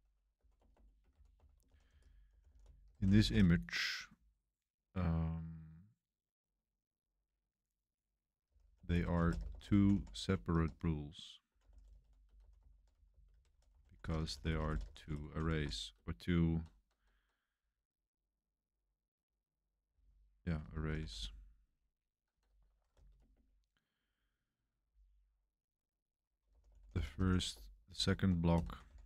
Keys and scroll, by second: 0.0-3.8 typing, 8.2-17.1 typing, 19.8-24.7 typing, 26.2-29.0 typing.